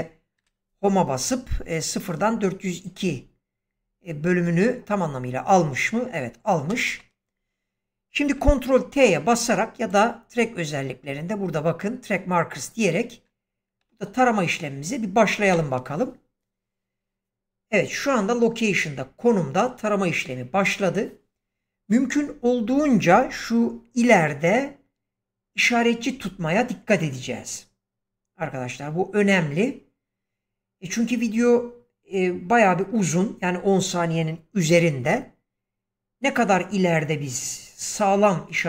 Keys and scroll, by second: 0.3 Home, 6.6 ctrl+space, 15.4 ctrl+t.